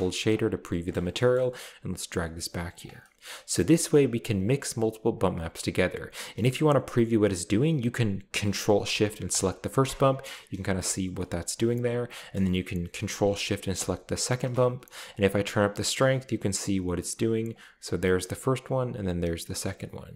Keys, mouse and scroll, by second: 0.3 click, 1.0-1.7 scroll down 1, 1.9 click, 2.6 click, 3.0 middle click, 3.2-4.1 scroll up 3, 9.3 ctrl+shift+click, 10.8 shift+middle click, 10.9-11.3 shift+scroll up 2, 11.0 middle click, 13.7 ctrl+shift+click, 15.1-17.0 drag, 16.8 middle click, 16.8 right click, 17.5-18.5 drag, 18.3 middle click, 18.3 right click, 19.0-20.1 drag, 20.0 right drag.